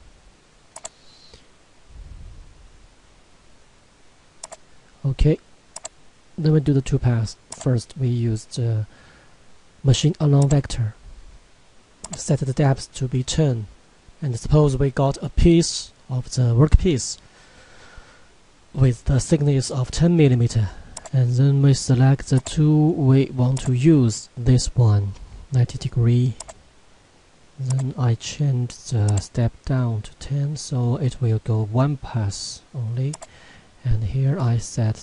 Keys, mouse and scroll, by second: 3.2 click, 4.4 click, 10.4 click, 21.0 click, 26.4 click, 33.1 click.